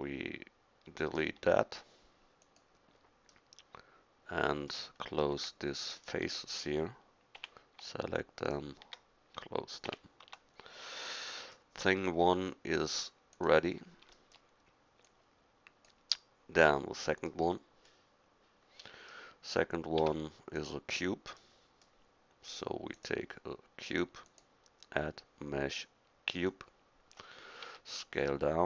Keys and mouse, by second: 1.4 x, 7.4 f, 9.9 f, 10.3 Tab, 20.0 a, 27.7 s.